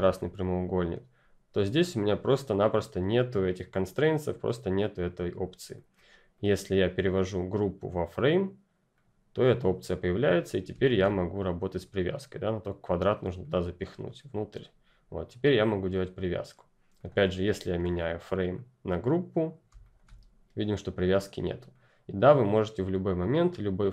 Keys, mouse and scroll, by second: 5.7 click.